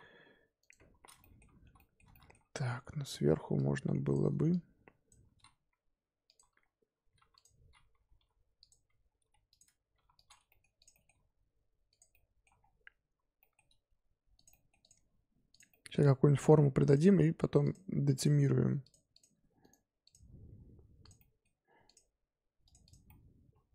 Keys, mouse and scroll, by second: 1.2 middle click, 2.0 scroll down 1, 2.1 middle click, 2.3-2.8 scroll up 3, 2.8 2, 3.5 click, 4.5 shift+click, 5.5 x, 7.1 3, 7.3 click, 8.1 i, 9.2 m, 9.9 1, 10.1 click, 10.4 middle click, 10.7 click, 10.9 middle click, 11.1 g, 12.1 middle click, 12.5-13.4 scroll down 3, 13.4 middle click, 13.6 g, 14.5 middle click, 14.8 click, 15.0 g, 15.7-16.8 middle drag, 16.8 click, 17.1 g, 18.1 click, 18.3 g, 19.1 click, 19.3 g, 20.0 click, 20.2 g, 21.1 middle click, 21.8 click, 22.1 g, 22.8 click, 23.0 middle click.